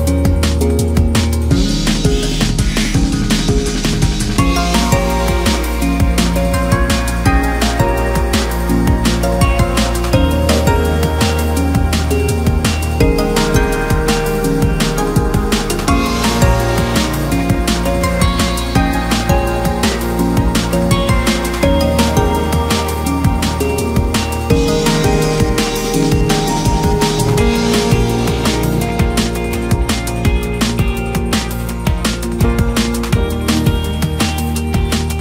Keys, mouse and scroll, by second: 0.2 middle click, 0.9-1.2 scroll up 1, 1.2 middle click, 1.5-2.2 scroll up 1, 2.2 2, 2.6 click, 3.9 ctrl+f, 4.8 scroll down 2, 5.0 middle click, 5.9 KP_Divide, 6.3 middle click, 6.7-7.7 scroll up 3, 6.9 middle click, 7.7 2, 8.1 click, 8.2 click, 9.1-9.5 middle drag, 9.5-9.9 scroll up 1, 9.9 click, 10.4 shift+click, 10.5 shift+drag, 10.7 scroll down 1, 10.8 middle click, 11.2-12.0 scroll up 2, 12.0 ctrl+b, 15.6 scroll down 1, 15.8-16.8 middle drag, 16.8-17.4 scroll up 1, 17.4 middle click, 17.6-18.6 scroll down 1, 18.6 shift+middle click, 18.9-20.0 scroll up 3, 20.0 click, 20.2 shift+click, 20.8 shift+click, 21.8 shift+click, 22.1 shift+click, 22.8 scroll down 2, 23.0 middle click, 23.6-24.0 scroll up 1, 24.0 shift+click, 24.2 shift+click, 24.6 shift+click, 25.0 shift+click, 25.6 i, 28.0-28.8 scroll down 1, 28.8 KP_1, 29.5 shift+middle click, 29.8-30.3 scroll up 1, 30.6 ctrl+r, 33.6-34.0 scroll down 2, 34.0 shift+middle click, 34.4-35.2 scroll up 4.